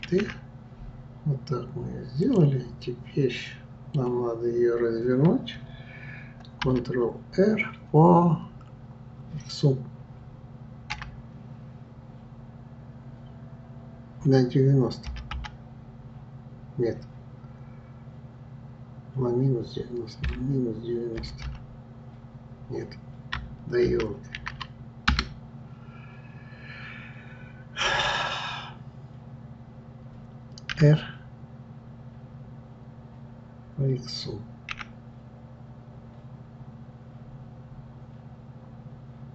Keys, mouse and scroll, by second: 0.0 shift+d, 2.8-5.8 middle drag.